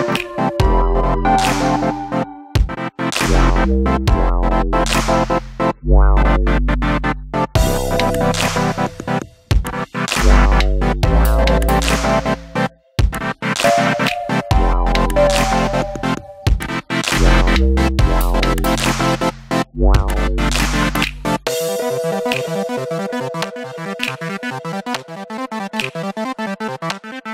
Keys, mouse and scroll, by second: 5.2 click, 6.1 click, 12.1 click, 13.8-14.6 drag, 15.2 click, 18.9 click, 20.2-21.5 drag, 21.7 click.